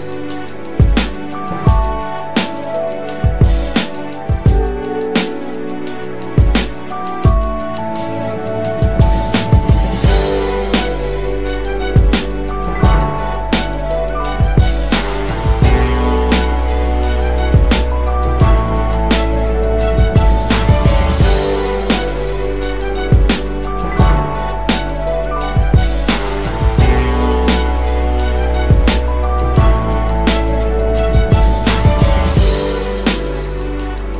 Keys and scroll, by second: 0.8 ctrl+d, 1.0 ctrl+d, 1.2 ctrl+d, 9.7 ctrl+d, 11.5 d.